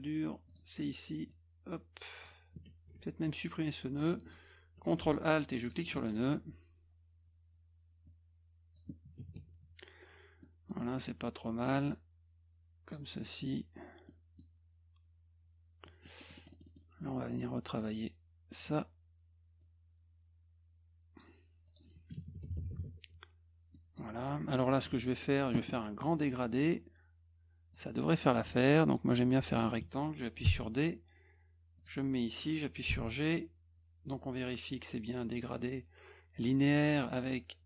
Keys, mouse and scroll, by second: 0.5 click, 1.3-2.3 drag, 5.6 ctrl+alt+click, 8.1 click, 10.4 middle click, 11.9-12.9 drag, 13.2 middle click, 14.1 middle click, 15.9 middle click, 16.2 middle click, 16.4 middle click, 16.5 middle click, 16.7 middle click, 17.8 click, 19.6-21.2 drag, 21.7 click, 23.8 middle click, 24.9 F1, 25.1 middle click, 26.5 click, 27.7-29.6 drag, 30.5 d, 31.8 click, 32.9 g.